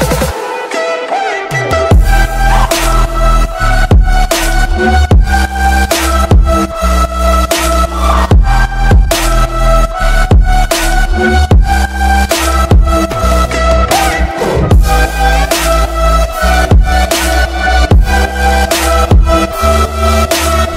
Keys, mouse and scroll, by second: 1.8 scroll up 1, 2.1 scroll down 1, 4.6 click, 10.4 ctrl+g, 10.7-12.2 drag, 11.8 shift+click, 12.4 shift+right click, 12.7 click, 13.2-14.0 scroll down 2, 14.0 click, 17.3 Left, 17.8-18.1 scroll down 1, 18.1 scroll up 1, 18.3 scroll down 1, 19.5-20.0 scroll up 1, 20.0 click.